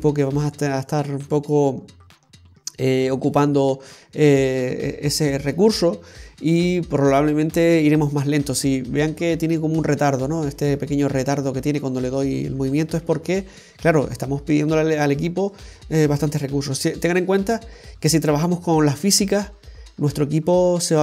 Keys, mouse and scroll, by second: 9.8 middle click.